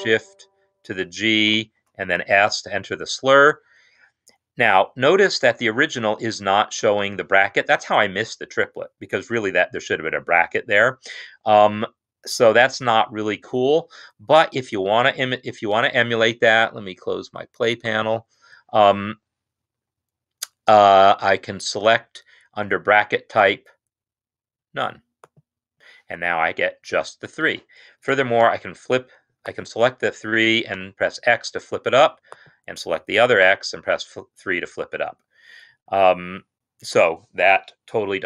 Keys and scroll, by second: 1.6 s, 28.6 typing, 30.9 typing, 33.6 typing.